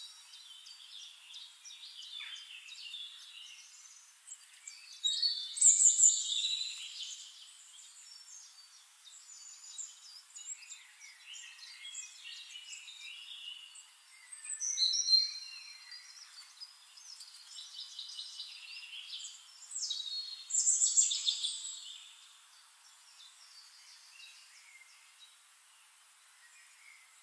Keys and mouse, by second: 2.4-5.7 right drag, 3.4-5.7 drag, 5.8 click, 7.3-10.5 drag, 11.2 click, 12.2 ctrl+d, 13.0-14.9 middle drag, 13.7 shift+click, 13.7-14.9 shift+right drag, 15.0 click, 16.2-21.8 drag, 17.0-19.1 shift+right drag, 18.5 middle click, 20.5 middle click, 20.5 right click, 22.6 click, 23.9-27.2 shift+drag.